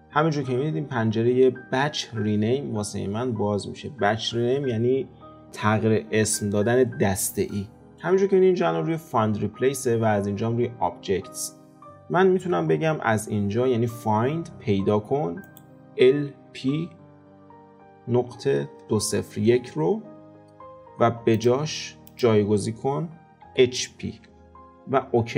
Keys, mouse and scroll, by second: 19.1 KP_0.